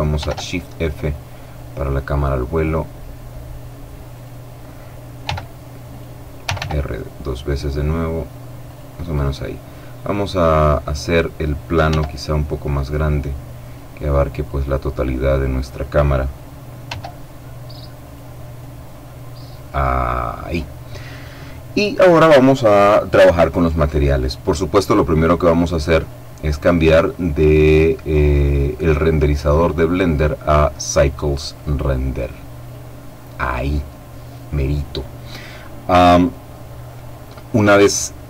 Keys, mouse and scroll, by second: 0.0 shift+f, 0.7-1.5 scroll up 1, 4.0 click, 5.1 g, 5.7 click, 6.3 r, 8.5 click, 8.8 right click, 10.8 click, 11.6 s, 13.4 click, 14.2-16.0 drag, 16.6 s, 17.8 click, 25.9 click, 32.4 click.